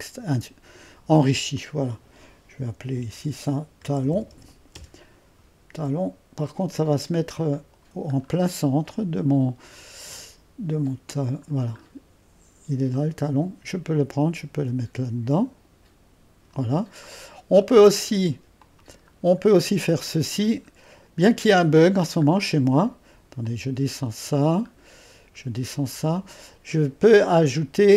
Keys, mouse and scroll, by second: 0.0-1.3 drag, 1.6-3.0 drag, 3.2-4.9 typing, 6.9-8.3 drag, 8.3-9.9 scroll down 1, 8.3 typing, 9.9-10.2 scroll down 1, 10.2-12.1 middle drag, 10.8-12.1 typing, 12.9-17.1 drag, 17.1-17.5 scroll up 1, 17.7-18.7 drag, 18.7 middle click, 19.1 scroll up 1, 19.2 click, 19.7-20.7 middle drag, 20.7-21.7 scroll up 1, 21.7 middle click, 23.5-24.9 drag, 24.9-25.9 scroll down 1.